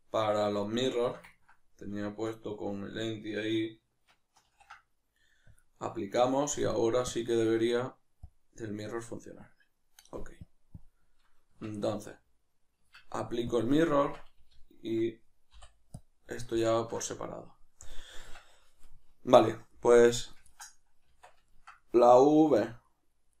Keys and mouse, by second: 4.4 ctrl+a, 6.3 right click, 7.1-11.5 drag, 11.5 Tab, 13.5-16.5 drag, 14.0 Tab, 16.5-20.2 ctrl+middle drag, 18.2 Tab, 20.2 right click, 20.5-23.4 ctrl+middle drag, 21.1 Tab, 22.6 a.